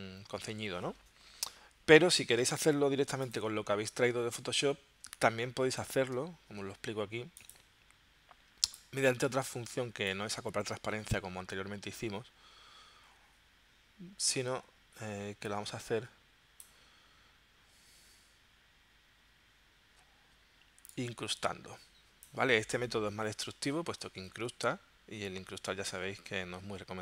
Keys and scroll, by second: 5.2 super+Tab.